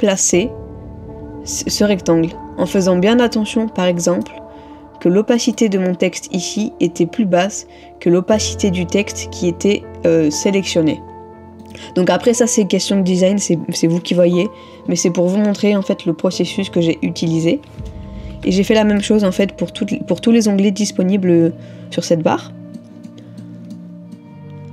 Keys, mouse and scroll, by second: 17.9 ctrl+-, 18.2 ctrl+-, 19.0 middle click, 22.8 middle click.